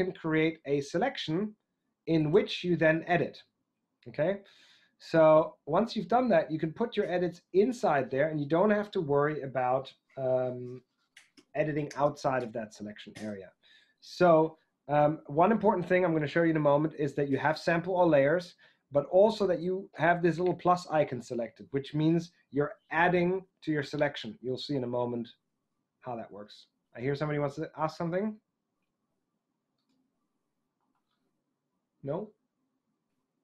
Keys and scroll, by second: 30.8 ctrl+alt+Tab.